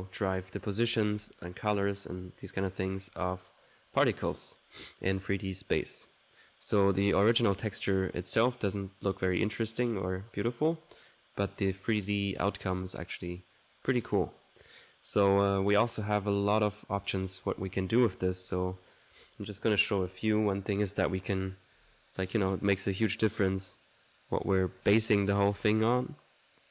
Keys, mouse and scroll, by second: 4.6 middle click, 5.7-6.9 drag, 7.1-8.6 middle drag, 11.4-12.4 drag, 11.8 right click, 13.8 middle click, 14.7 click, 15.7 click, 18.2 middle click, 18.9 click, 20.9-22.0 drag, 21.8-22.7 typing, 22.7-26.7 drag.